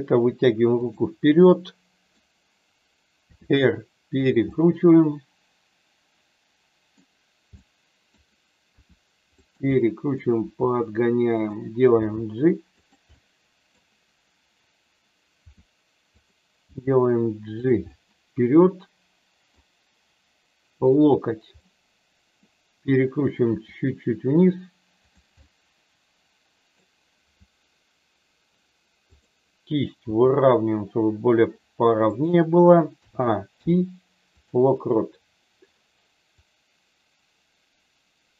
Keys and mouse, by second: 0.8 click, 1.5 middle click, 3.4 r, 4.1 click, 4.5-7.0 middle drag, 7.5 middle click, 8.6 r, 9.3 click, 9.6 middle click, 10.3 r, 11.3 click, 12.0 g, 12.7 click, 13.1 middle click, 15.3 r, 16.1 click, 16.6 g, 17.9-19.6 middle drag, 20.9 click, 21.5 middle click, 23.5 r, 25.0 click, 25.3-26.7 middle drag, 29.1 click, 30.0 r, 32.9 a, 33.5 i, 36.4-38.3 drag.